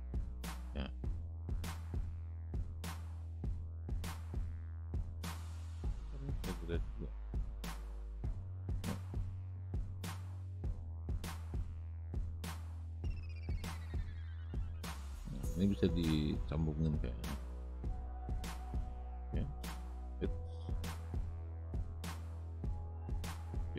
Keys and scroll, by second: 5.9 Delete, 10.0 ctrl+z, 20.8 ctrl+z.